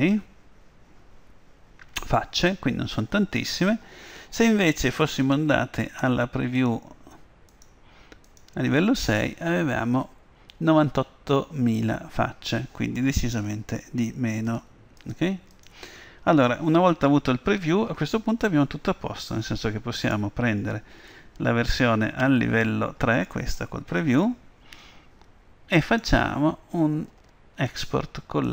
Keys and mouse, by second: 5.3-10.2 drag, 14.5-17.4 drag, 20.1-21.1 right drag, 21.1-22.9 middle drag, 25.9-27.8 drag.